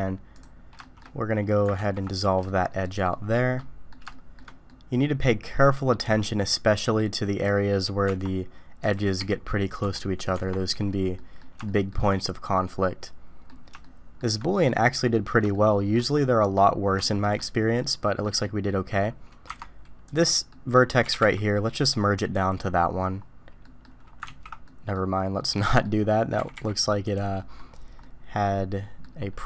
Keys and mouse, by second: 0.8 shift+drag, 1.0 middle click, 1.8 ctrl+x, 2.5-2.8 shift+middle drag, 3.1 shift+middle click, 3.6 middle click, 4.1 shift+middle click, 4.7 middle click, 4.7-6.0 drag, 8.0 Tab, 8.8 click, 9.2 g, 10.3 Tab, 11.2 drag, 11.6 shift+click, 12.1-13.5 drag, 13.8 shift+middle click, 14.7 middle click, 15.5 shift+middle click, 17.0 shift+click, 17.7 click, 18.2 click, 19.5 Tab, 20.5 click, 21.0 g, 23.6 click, 24.3 ctrl+z, 24.6 click, 25.6 click, 26.4 g, 27.4 click, 28.0-29.0 drag.